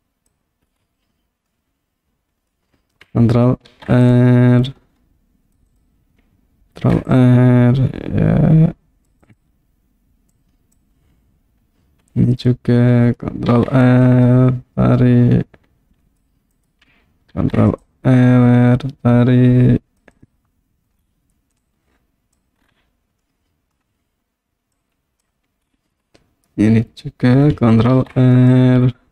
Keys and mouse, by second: 1.5-2.6 middle drag, 3.7 ctrl+r, 5.7 click, 9.3 click, 10.4 click, 13.5 ctrl+r, 16.6 click, 17.4 ctrl+r, 20.1 click, 21.6 click, 23.3 middle click, 24.8 click, 28.0 ctrl+r.